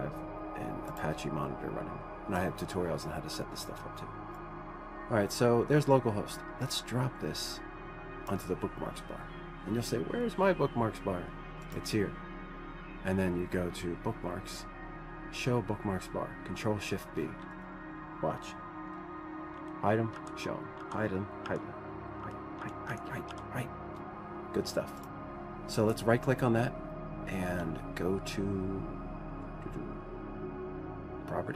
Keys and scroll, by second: 21.0 ctrl+shift+b, 21.0 ctrl+shift+b, 21.3 ctrl+shift+b, 22.0 ctrl+shift+b, 22.8 ctrl+shift+b.